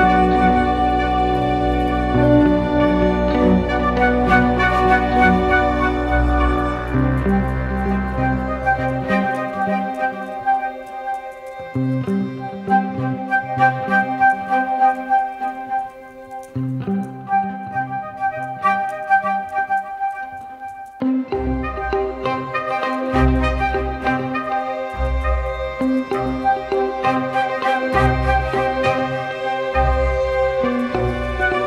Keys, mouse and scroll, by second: 13.2-13.6 typing, 27.7 double click.